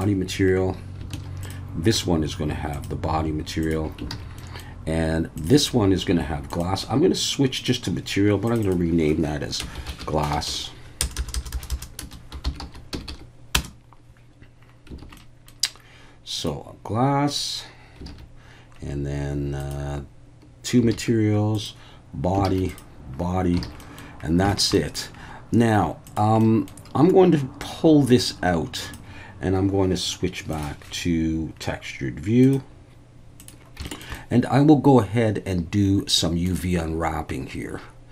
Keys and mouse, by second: 1.2 alt+a, 1.4 click, 2.7 click, 4.1 alt+a, 4.4 middle click, 6.5-7.7 drag, 8.5 click, 8.7-14.1 drag, 10.5 s, 11.2 BackSpace, 11.3 BackSpace, 11.7 BackSpace, 13.1 s, 15.0 alt+a, 15.2 middle drag, 16.4 click, 20.9 alt+a, 21.5 click, 22.5 alt+a, 22.7 click, 23.6 alt+a, 23.8 middle click, 24.5 shift+middle click, 24.7 middle click, 26.4 middle drag, 27.7-28.9 drag, 30.5 click, 32.4-33.5 drag, 33.9 shift+middle click, 34.2-36.5 middle drag.